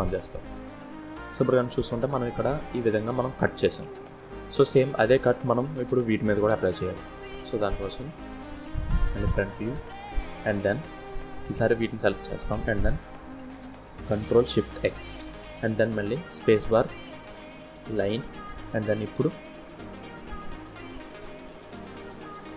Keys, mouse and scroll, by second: 0.8 scroll down 1, 2.7 scroll down 2, 6.6 click, 7.7 KP_1, 8.5-9.0 scroll up 6, 9.1 shift+scroll down 1, 9.1 shift+scroll up 1, 9.2 shift+middle click, 10.7 click, 14.0 ctrl+shift+x.